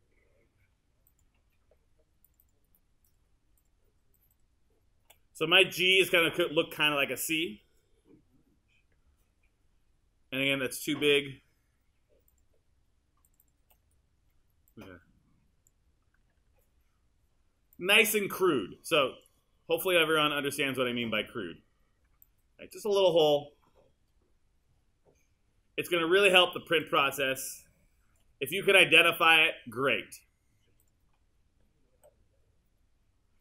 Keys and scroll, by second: 5.9 BackSpace, 16.5 r, 18.5 r, 32.0 w.